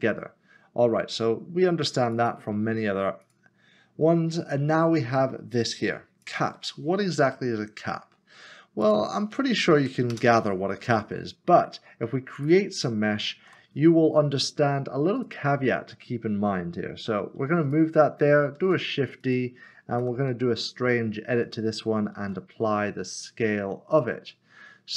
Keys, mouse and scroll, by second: 2.1-3.2 scroll down 1, 3.2 click, 6.2 click, 7.2 scroll down 1, 8.8-9.8 scroll down 1, 9.8 3, 10.1 Return, 12.5 shift+right click, 13.4 a, 15.3 click, 17.7 g, 18.1 s, 19.2 d, 20.2 s, 20.3 z, 21.5 click, 22.2 ctrl+a.